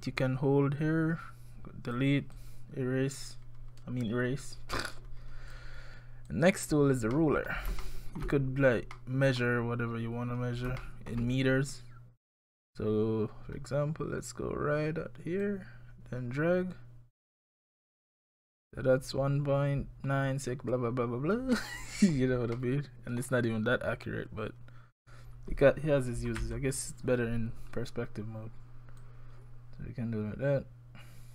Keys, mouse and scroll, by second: 0.0 click, 2.3 click, 6.3 click, 7.1 middle click, 7.8 shift+middle click, 8.4-8.9 scroll up 4, 8.9 middle click, 10.3-10.8 scroll down 3, 10.8 shift+middle click, 13.5-14.1 scroll up 2, 15.4 click, 21.5 middle click, 22.6 middle click, 24.8 scroll up 3, 26.4 KP_1, 27.0-27.7 scroll down 4, 29.0 click.